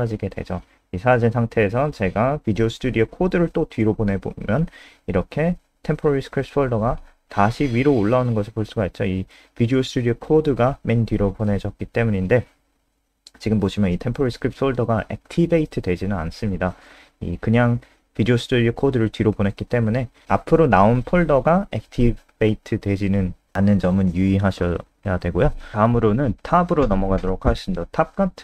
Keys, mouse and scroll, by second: 1.3 click, 3.8 b, 16.1 click, 18.2 b, 18.7 click, 18.9 b, 21.7 BackSpace, 26.4 click, 26.4-27.7 scroll down 4.